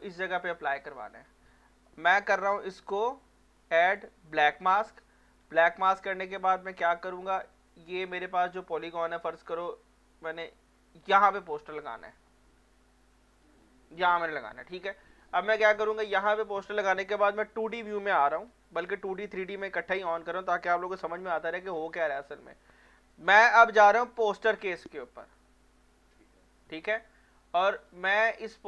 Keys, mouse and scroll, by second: 0.4 scroll down 1, 2.8 click, 6.8 click, 8.1 alt+middle click, 8.9-9.3 scroll down 1, 11.0 click, 11.8 alt+middle click, 13.6 alt+click, 14.5 alt+click, 14.6-16.4 alt+drag, 16.4 scroll up 1, 17.4 F2, 18.5 F3, 19.8 F1, 21.0 f, 21.8 f, 24.2 click, 27.9 click.